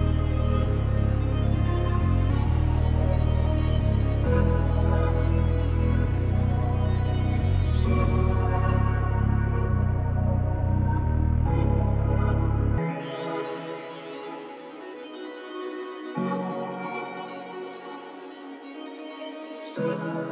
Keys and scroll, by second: 2.9 r, 9.3-12.7 typing, 10.6 Return.